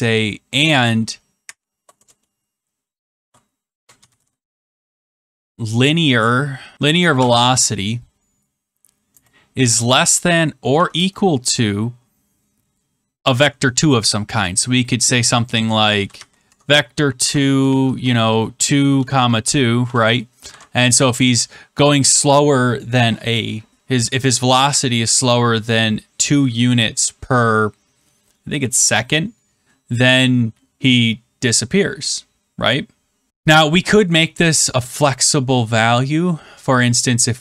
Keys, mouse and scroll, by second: 1.4 shift+4, 1.9 BackSpace, 3.1-4.6 typing, 6.1 Down, 6.5-7.2 typing, 9.5-11.2 typing, 15.2-17.6 typing, 16.4 Tab, 18.6-19.7 typing, 20.4 ctrl+s.